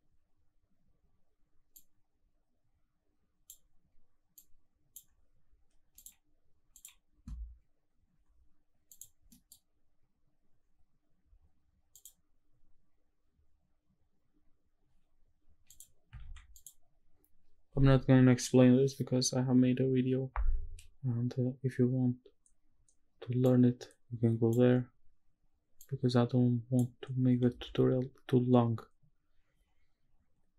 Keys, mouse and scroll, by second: 1.8-3.5 drag, 4.3-5.0 drag, 6.0-7.8 scroll up 1, 8.2 click, 8.2 scroll up 2, 8.9 click, 10.0-11.5 scroll down 1, 11.5 middle click, 11.5-13.8 scroll down 1, 15.1 click, 15.1-15.7 scroll down 3, 15.7 click, 16.3 shift+d, 16.5 click, 21.7-22.4 scroll up 1, 22.4-23.4 scroll up 1, 23.4-24.6 drag, 25.8-26.9 drag, 29.3 scroll up 1.